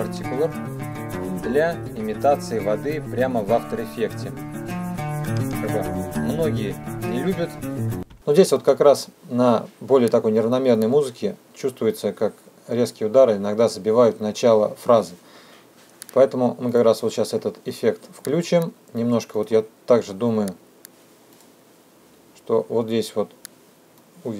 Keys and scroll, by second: 8.2 space.